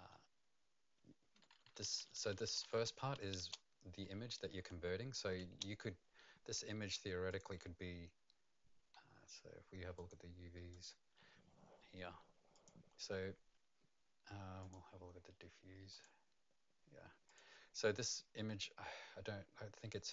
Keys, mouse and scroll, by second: 0.1 Right, 0.1 Left, 0.1 BackSpace, 1.3 Right, 1.5 Right, 1.8 Right, 2.0 Right, 2.3 Right, 2.5 Right, 2.8 Right, 3.1 Left, 3.4 space, 4.1 Left, 7.3 click, 9.9 click, 12.5 click, 14.6 click, 15.9 click, 17.2 click.